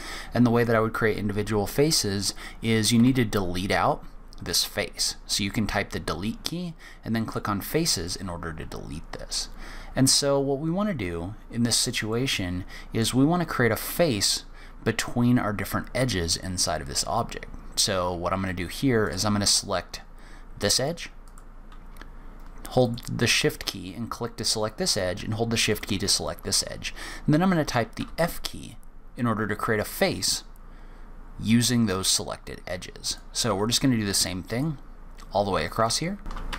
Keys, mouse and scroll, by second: 3.0 Delete, 8.0 middle click, 12.1 middle click, 19.0 click, 20.7 click, 21.2 click, 22.8 shift+click, 23.8 middle click, 25.7 shift+click, 28.0 f, 33.0 click, 34.5 shift+click, 35.8 click, 36.5 click, 36.5 f.